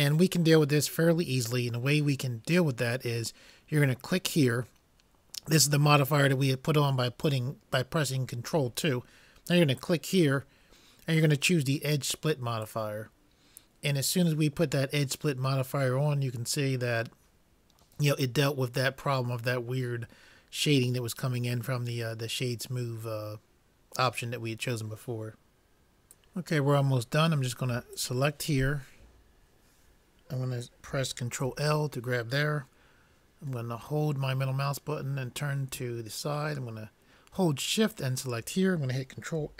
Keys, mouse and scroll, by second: 28.0-31.5 drag, 31.5 ctrl+l, 33.8-35.1 middle drag, 38.0-39.5 drag.